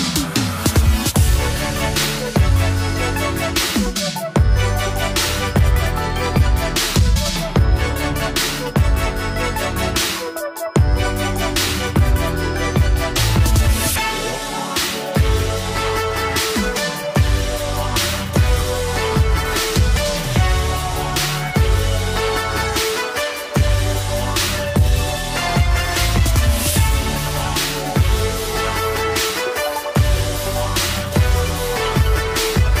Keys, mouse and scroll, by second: 3.0-4.1 scroll up 1, 4.1 click, 6.7-8.4 drag, 23.6-25.3 drag, 32.0-32.8 drag.